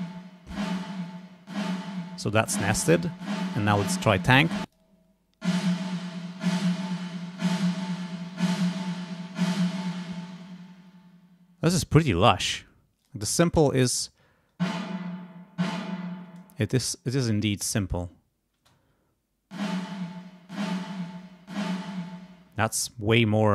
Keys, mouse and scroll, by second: 4.6 click, 9.8 space, 13.0 click, 13.6 space, 16.4 space, 17.9 click, 18.5 space, 22.2 space.